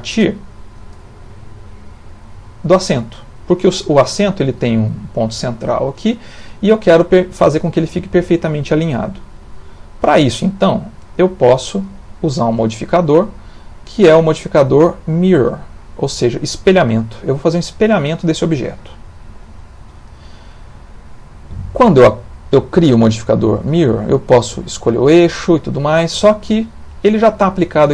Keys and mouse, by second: 0.8 click, 1.4 g, 4.1 ctrl+middle click, 11.0 click, 12.5 click, 26.7 middle click, 27.8 ctrl+middle click.